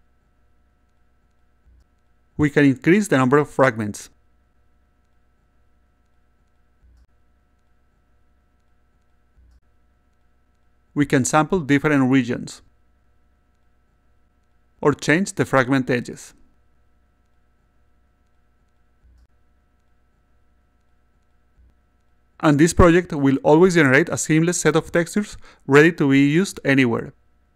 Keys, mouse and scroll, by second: 0.3-1.9 alt+drag, 3.5 click, 4.4 click, 5.1 1, 5.3 3, 5.9 click, 6.6 click, 6.8 1, 7.2 click, 7.4 1, 7.5 3, 9.1-10.1 alt+drag, 11.6 click, 12.5 click, 13.6 click, 14.9 click, 15.0 click, 16.2 click, 17.5 click, 18.8 click, 20.9-24.0 alt+drag.